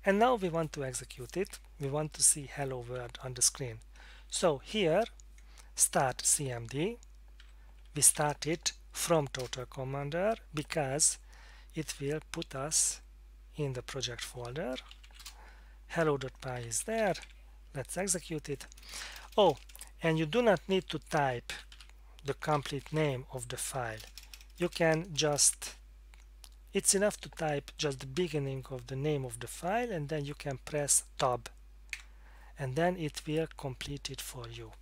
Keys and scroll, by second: 7.8-8.6 typing, 9.4 Return, 14.7-17.6 typing, 18.8-19.8 typing, 21.3-25.3 typing, 31.9 Tab.